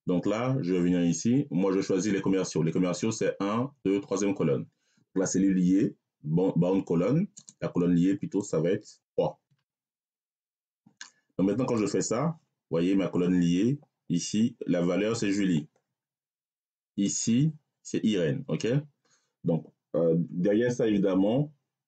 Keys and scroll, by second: 9.3 3.